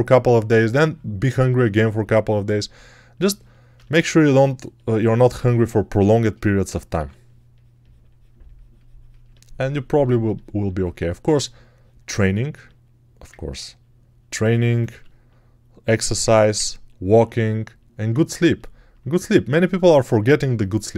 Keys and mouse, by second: 6.8 6, 10.8 1, 14.8 g, 16.1-20.9 alt+drag.